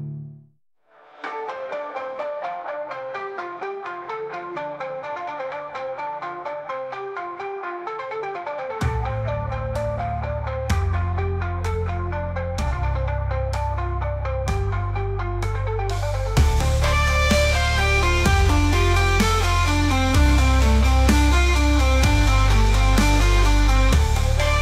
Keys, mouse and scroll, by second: 0.6 middle click, 1.9-2.8 middle drag, 2.8 scroll up 2, 3.0-4.1 middle drag, 4.1 g, 8.2 scroll up 3, 8.3-9.5 middle drag, 9.5 g, 11.7 middle click, 12.5 scroll down 2, 12.7 scroll up 1, 12.8-13.7 middle drag, 13.7 click, 14.1-15.6 middle drag, 17.0 click, 18.0 click, 19.1 s, 20.6-22.2 drag, 22.2 s.